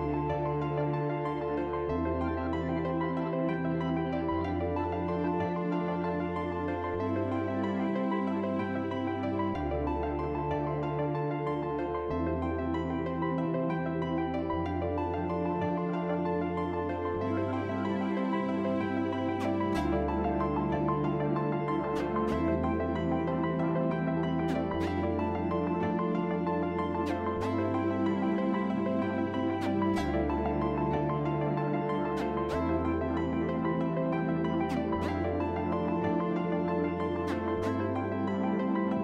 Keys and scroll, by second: 1.1 F4, 5.8 shift+s, 6.6 shift+s, 14.7 ctrl+z, 14.8 ctrl+z, 18.0 shift+s, 18.3 shift+s, 20.2 shift+s, 20.5 shift+s, 24.4 ctrl+z, 25.2 F4, 26.8 ctrl+z.